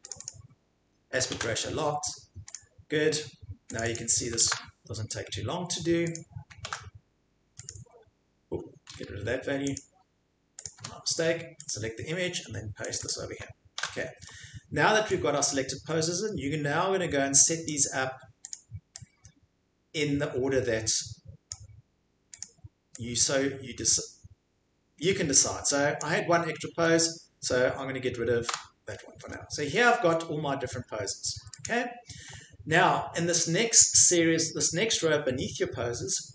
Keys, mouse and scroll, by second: 0.1 click, 0.2 click, 1.3 ctrl+v, 2.5 click, 3.8 click, 3.9 click, 4.5 ctrl+v, 6.1 click, 6.6 ctrl+v, 7.7 click, 9.8 click, 10.6 click, 10.8 Delete, 11.7 click, 12.9 click, 13.0 click, 13.8 ctrl+v, 17.6 click, 18.5 click, 21.5 click, 22.4 click, 26.0 click, 28.5 Delete, 31.6 click.